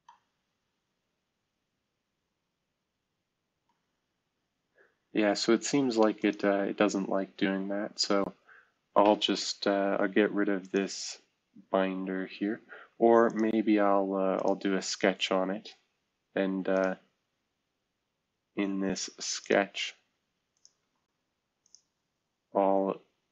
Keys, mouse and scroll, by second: 6.2 click, 9.5-10.3 scroll down 2, 10.6-12.2 drag, 16.7 click, 20.7 space.